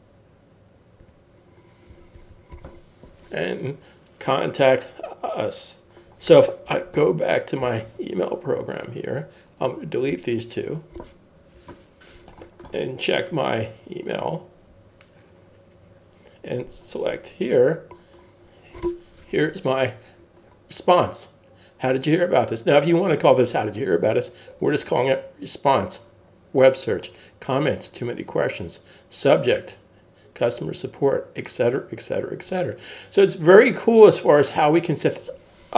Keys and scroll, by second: 1.7-3.6 typing, 7.0 super+Tab.